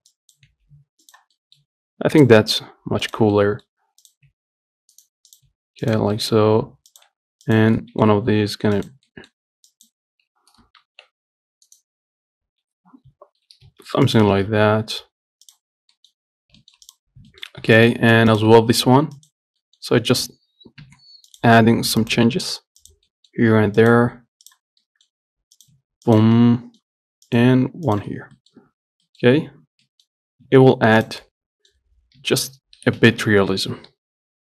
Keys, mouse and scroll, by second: 0.4 click, 0.7 g, 1.6 middle click, 2.4 click, 2.6 g, 3.6 middle click, 4.3 click, 4.5 g, 5.6 click, 5.8 g, 6.4 middle click, 7.1 click, 7.3 g, 8.0-9.0 middle drag, 9.0 click, 9.4 middle click, 10.0 click, 11.1 ctrl+shift+b, 12.5 scroll up 1, 13.4 g, 14.6 Tab, 14.7-15.1 scroll down 6, 15.7 click, 16.0 scroll up 1, 16.2 middle click, 16.6 scroll down 1, 16.9 shift+middle click, 17.1 click, 17.4 scroll down 3, 17.5 shift+middle click, 17.8-18.6 scroll up 2, 18.0 shift+middle click, 18.6 click, 18.8 Tab, 18.9 scroll up 3, 19.4 click, 19.8 middle click, 20.3 click, 21.1 g, 22.2 click, 22.4 g, 23.3 middle click, 24.0 click, 24.2 g, 25.1 middle click, 25.8 click, 26.0 g, 26.6 middle click, 27.5 click, 27.7 g, 28.4 scroll down 4, 28.6 middle click, 28.8 Tab, 29.3 middle click, 29.6-29.9 scroll up 6, 30.1 middle click, 30.7 Tab, 31.2 click, 31.5 middle click, 32.4 h, 33.2 ctrl+z, 34.1 g.